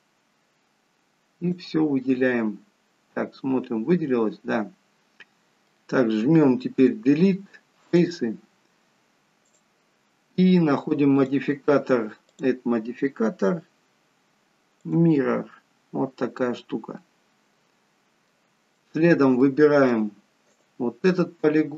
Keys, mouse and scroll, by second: 1.9 middle click, 6.7 Delete, 9.4 click, 11.1 click, 16.1-17.0 scroll up 2, 17.0 middle click, 18.7 shift+middle click, 19.3 middle click, 20.4 click.